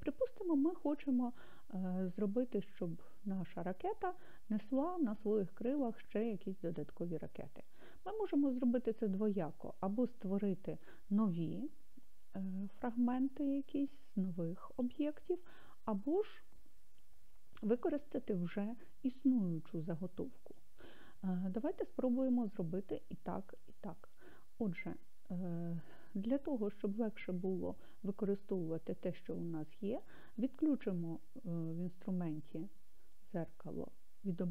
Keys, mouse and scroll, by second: 31.8 click, 33.1 click.